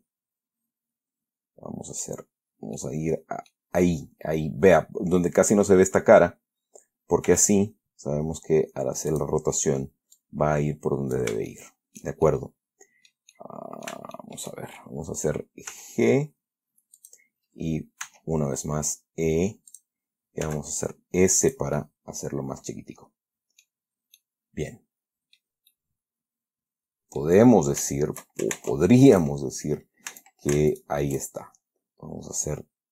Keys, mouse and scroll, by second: 0.0 middle click, 0.1 scroll down 2, 3.1 middle click, 7.6 r, 9.4 click, 10.5-11.7 drag, 11.8-13.6 shift+middle drag, 14.2 shift+middle click, 16.0 g, 17.3 click, 18.3 e, 20.0 click, 20.8 s, 21.7 click, 22.1-24.1 middle drag, 24.1-24.5 scroll down 1, 24.5-25.9 middle drag, 26.0-27.7 middle drag, 27.7-28.2 scroll up 3, 28.2 shift+middle click, 28.9 ctrl+shift+Tab, 29.4 ctrl+shift+click, 30.4 a, 31.0 alt+shift+right click.